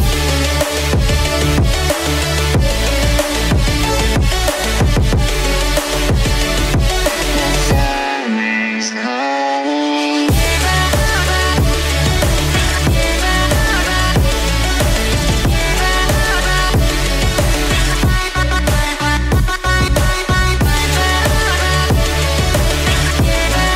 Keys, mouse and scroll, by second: 0.2 x, 2.5 click, 3.1 click, 4.3 g, 4.9 x, 6.8 click, 8.1-8.4 scroll up 1, 8.4 scroll down 1, 8.5 scroll down 1, 8.5 scroll up 1, 9.0 click, 9.7-10.1 drag, 10.2 click, 10.5 click, 12.5 shift+click, 14.6-15.0 drag, 15.6-16.0 drag, 18.1 ctrl+j, 21.4 click, 22.0-22.4 scroll down 2, 22.3 click.